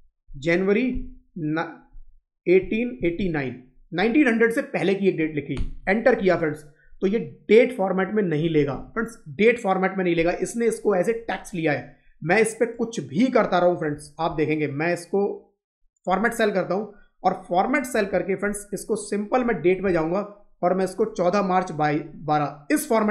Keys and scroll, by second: 6.1 Up, 8.3 Left, 8.6 Right.